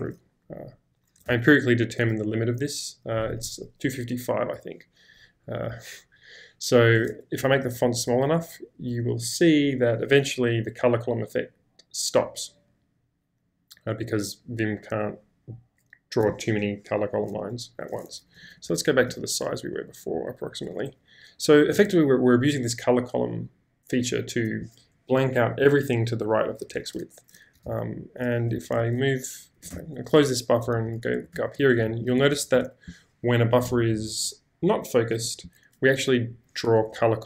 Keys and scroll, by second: 1.3 typing, 7.5 super+-, 18.2 super+=, 27.6 space, 27.6 q, 28.5 Escape, 28.7 Escape, 29.7 q, 30.8 ctrl+k, 31.3 ctrl+j, 31.8 ctrl+k, 32.4 ctrl+j.